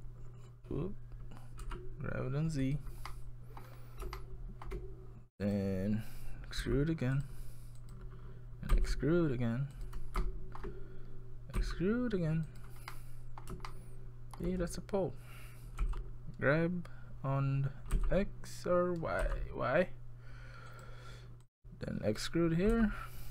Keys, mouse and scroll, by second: 3.1 middle click, 3.8 scroll up 3, 4.2 shift+middle click, 4.7 shift+scroll down 1, 5.4 click, 6.6 e, 7.8 click, 8.7 e, 10.2 shift+middle click, 11.6 e, 12.9 middle click, 13.7 shift+middle click, 15.8 g, 21.4 click, 22.7 e.